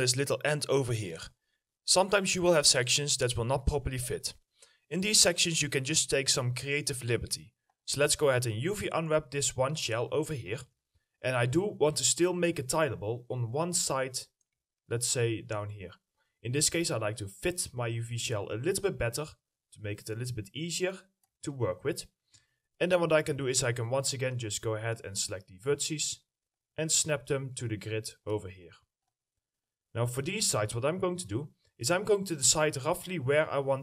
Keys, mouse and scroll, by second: 0.1-1.5 scroll up 1, 8.1 scroll down 1, 8.8 middle click, 9.8 ctrl+click, 10.8 middle click, 10.8 ctrl+click, 11.1-13.4 scroll up 1, 14.0 middle click, 14.2 scroll up 1, 15.2 ctrl+click, 16.9 scroll up 1, 16.9 ctrl+click, 19.9 ctrl+click, 21.5 middle click, 21.5 ctrl+click, 24.5 double click.